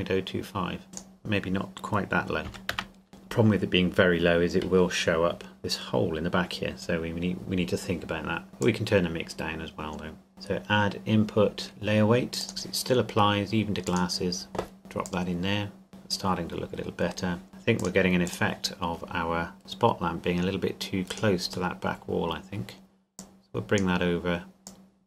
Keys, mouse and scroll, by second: 2.1 click, 2.5 KP_Decimal, 2.7 KP_0, 3.1 KP_Enter, 8.6 click, 12.4 click, 15.9 middle click, 17.8 click, 18.7-19.2 scroll down 1, 21.1 right click, 21.7 middle click, 23.2 click.